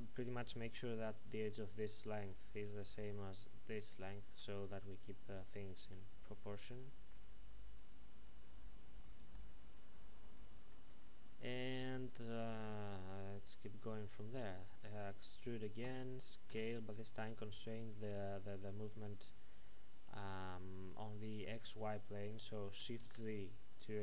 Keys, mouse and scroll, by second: 0.8-4.4 typing, 1.6 click, 5.9-9.1 typing, 6.4 middle click, 7.8 right click, 10.7 middle click, 15.8-16.5 typing, 22.8 shift+Num_Lock, 22.8 typing.